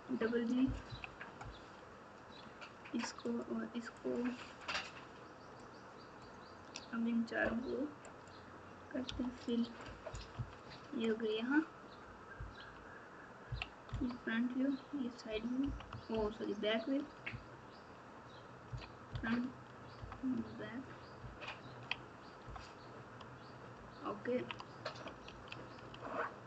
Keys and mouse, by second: 0.8 KP_2, 3.3 click, 3.9 shift+click, 5.7 shift+click, 9.4 click, 10.3 KP_3, 12.6 KP_6, 13.4 KP_1, 13.8 KP_9, 15.6 KP_5, 16.1 ctrl+KP_6, 17.2 KP_6, 18.6 ctrl+KP_1, 19.1 ctrl+KP_9, 21.1 ctrl+KP_6, 21.6 ctrl+KP_6, 22.4 KP_9, 23.7 ctrl+KP_6, 25.2 alt+z, 26.1 alt+z.